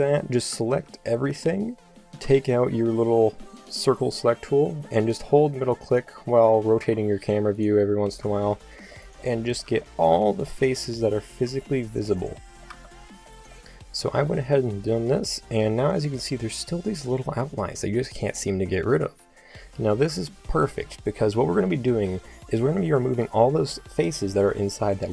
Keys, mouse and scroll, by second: 0.0 a, 0.8 t, 2.3 c, 6.2-7.7 middle drag, 6.8 c, 8.2 c, 9.8 c, 11.5 c, 12.7 c, 21.9 middle click, 22.8 z.